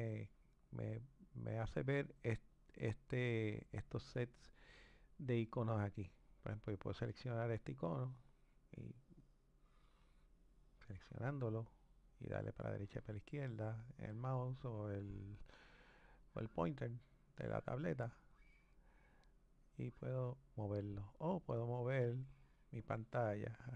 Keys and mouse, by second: 2.5-5.5 drag, 6.6-12.7 drag, 21.7-23.7 drag.